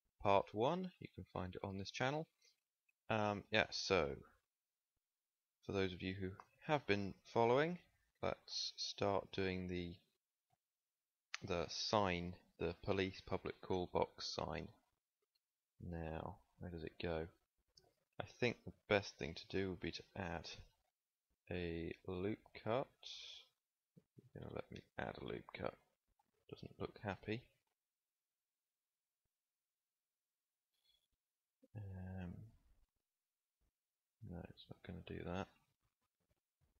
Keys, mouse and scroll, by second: 5.4 KP_1, 6.4 Tab, 9.8 KP_1, 15.9 z, 18.9 a, 20.0 ctrl+r, 26.5 Escape, 27.3 z, 31.2 KP_1, 32.2 ctrl+r, 35.2 ctrl+z, 35.9 a.